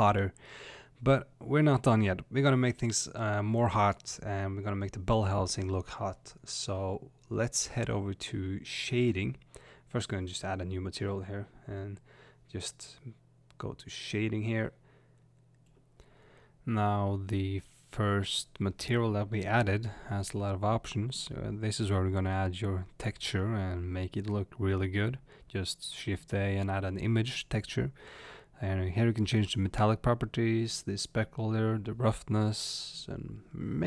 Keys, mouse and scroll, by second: 0.5 click, 1.0-2.9 middle drag, 1.8 space, 2.9 click, 4.9-9.8 middle drag, 5.5 click, 9.8-15.2 drag, 16.4-23.9 middle drag, 18.2-18.7 scroll up 2, 23.9 click, 27.7-33.8 drag.